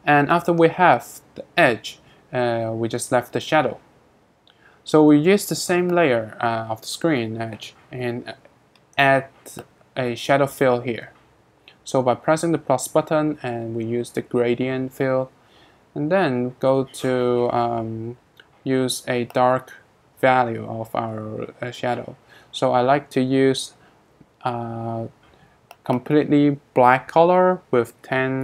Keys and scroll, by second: 27.6-28.4 typing.